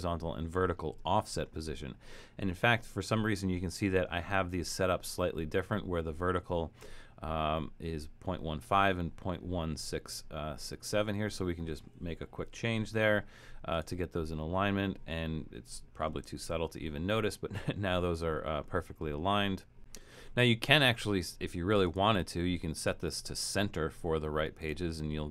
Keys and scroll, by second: 12.2-13.0 typing, 16.4 shift+Return.